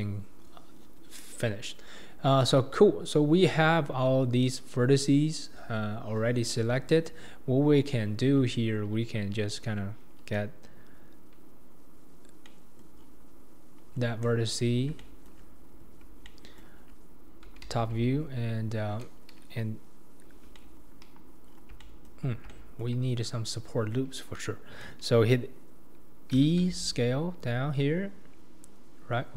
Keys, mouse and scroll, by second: 1.9-2.4 scroll up 2, 2.4-2.8 scroll down 1, 2.8 scroll up 2, 6.5-8.6 scroll down 1, 8.6-9.5 scroll down 2, 12.5 middle click, 13.0-13.6 scroll down 5, 14.2 KP_7, 15.0 shift+middle click, 15.9-16.3 scroll up 3, 16.3 shift+middle click, 16.8-17.6 scroll up 5, 17.6 alt+z, 18.1-18.7 scroll up 4, 18.7-20.6 scroll up 1, 20.6 middle click, 21.0 KP_1, 21.5-21.8 scroll down 4, 21.8-25.7 shift+middle drag, 26.5 e.